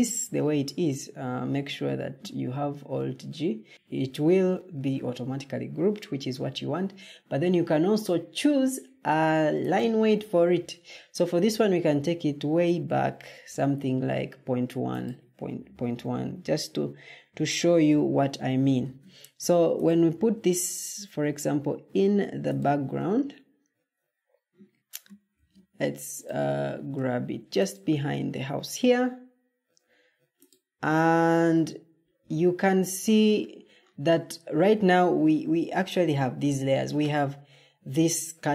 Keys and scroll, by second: 0.1 alt+g, 18.7 ctrl+d, 25.2 ctrl+d.